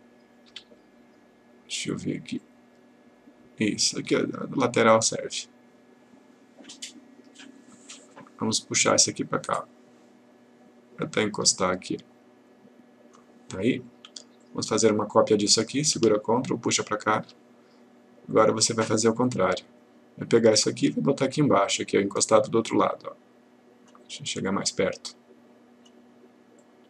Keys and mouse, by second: 0.5 F4, 2.4-3.7 click, 5.0-8.7 click, 16.3-17.6 ctrl+click, 20.7-24.1 click.